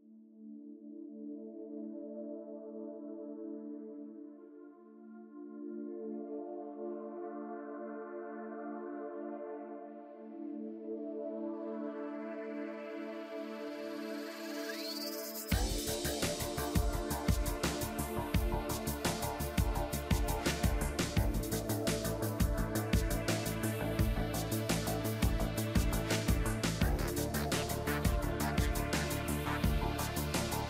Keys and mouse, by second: 1.0 KP_4, 1.0 KP_1, 2.1 click, 3.3 ctrl+s, 4.1 KP_3, 5.1 middle click, 5.5 g, 7.2 KP_1, 8.3 click, 10.4 ctrl+s, 12.9 KP_1, 14.9 ctrl+s, 16.3 ctrl+s, 17.5 KP_3, 19.7 e, 20.6 ctrl+z, 21.7 ctrl+z, 22.2 ctrl+z, 23.7 ctrl+z, 24.5 e, 27.0-28.5 drag, 27.2 g, 28.3 KP_1.